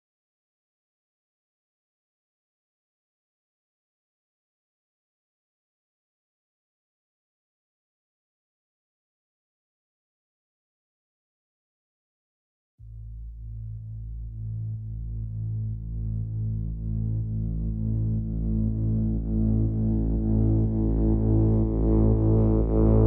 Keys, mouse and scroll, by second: 0.7 ctrl+r, 1.9 a, 2.0 a, 3.3 middle click, 4.7 ctrl+z, 4.7 ctrl+z, 4.8 ctrl+z, 5.0 ctrl+z, 5.1 ctrl+z, 5.2 ctrl+z, 5.3 ctrl+z, 5.4 ctrl+z, 12.0-12.5 ctrl+z, 13.0 ctrl+z, 13.2-13.5 ctrl+z, 13.8 ctrl+z, 13.9 ctrl+z, 14.1 ctrl+z, 14.2 ctrl+z, 14.3 ctrl+z, 14.5 ctrl+z, 14.6 ctrl+z, 14.8 ctrl+z, 14.9 ctrl+z, 15.0 ctrl+z, 15.2 ctrl+z, 15.4 ctrl+z, 15.7 ctrl+z.